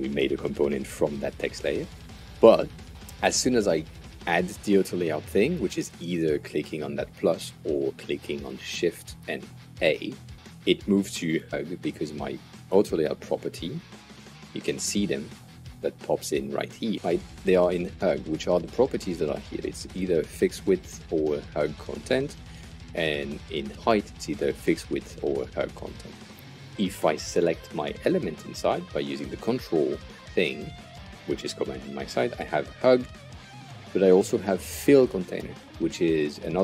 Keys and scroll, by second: 9.6 shift+a, 14.0 super+z, 15.4 shift+super+z.